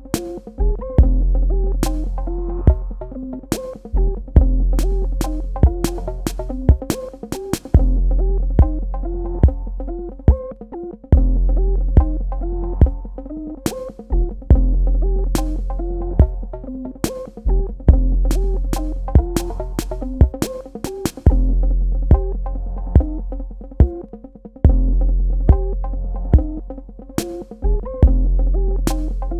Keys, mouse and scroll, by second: 3.8 alt+shift+click, 7.9 click, 9.4 a, 9.9 click.